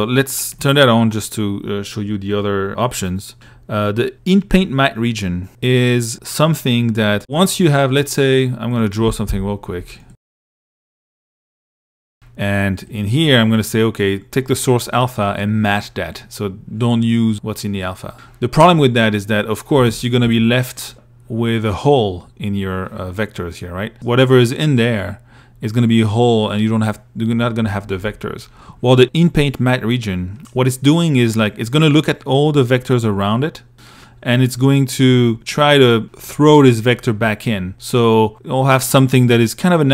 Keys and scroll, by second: 8.5 p, 10.1 i, 19.0 i, 19.4 a, 20.1 l.